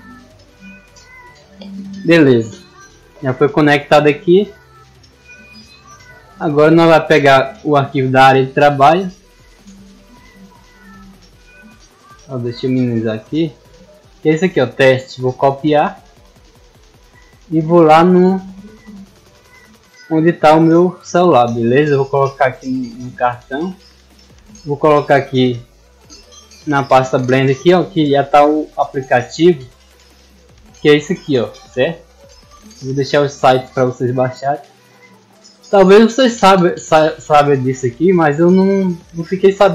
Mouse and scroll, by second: 5.6 click, 7.7 click, 9.5 click, 10.8 click, 12.2 click, 13.2 click, 14.4 click, 15.2 right click, 16.5 click, 17.9 click, 18.9 click, 20.0 click, 21.0 click, 21.2 click, 22.3 click, 22.4 click, 24.6 click, 24.8 click, 26.0 click, 26.7 click, 27.9-29.0 drag, 30.2 click, 31.3 click, 32.3 right click, 33.4 click, 35.3 click, 36.4 click, 37.4 click, 39.4 click.